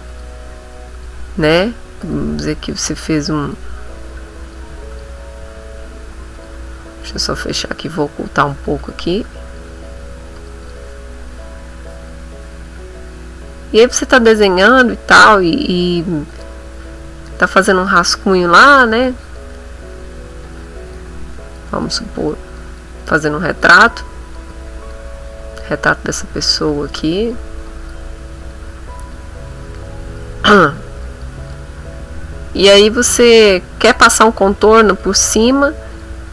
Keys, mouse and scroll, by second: 0.1 click, 1.0 click, 2.0 click, 3.4 click, 4.4 click, 4.9 click, 6.4 click, 7.0 click, 8.5 click, 9.3 click, 10.4 click, 12.7 right click, 16.2 click, 16.8 middle click, 17.2-18.5 drag, 18.5 click, 19.0 click, 19.8-21.1 drag, 21.2 click, 22.0 click, 22.5 click, 23.0 click, 23.9-25.0 drag, 25.1 click, 26.0 click, 27.0 click, 27.6 click, 28.1 click, 28.8-29.9 drag, 30.0-31.4 drag, 31.5 middle click, 32.4 click, 33.5 click, 34.2 middle click, 35.0 middle click, 35.7 click, 36.2 middle click.